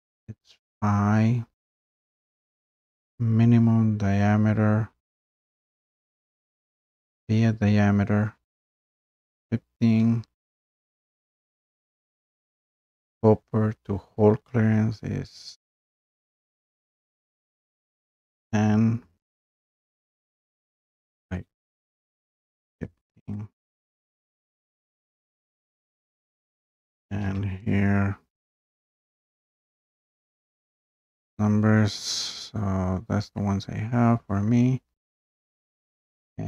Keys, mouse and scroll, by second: 16.5-17.8 drag, 18.0-18.3 typing, 20.0 click, 20.9 click, 22.0-22.5 typing, 23.4 click, 25.8 click, 26.9-27.2 typing, 30.3 click.